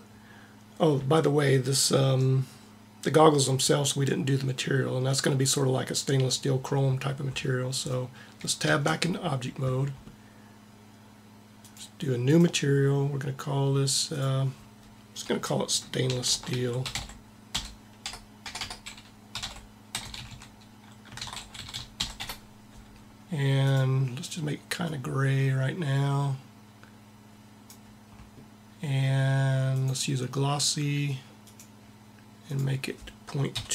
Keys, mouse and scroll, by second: 1.5-3.4 middle drag, 8.4 Tab, 18.3 BackSpace, 20.0 s, 21.4 e, 29.5-31.1 drag.